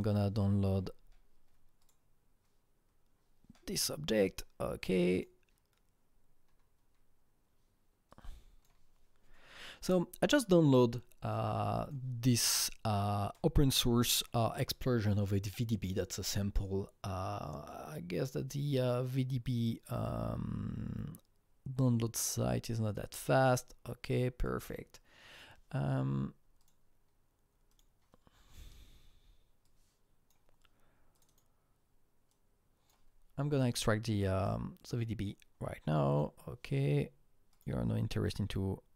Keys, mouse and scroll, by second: 0.4-0.8 scroll down 6, 1.8 click, 5.1 click, 5.1-7.4 scroll down 1, 7.4 click, 8.1-11.0 drag, 11.3-14.3 drag, 24.4-27.7 drag, 27.7 click, 29.6-36.1 drag, 34.4 right click, 37.5 click.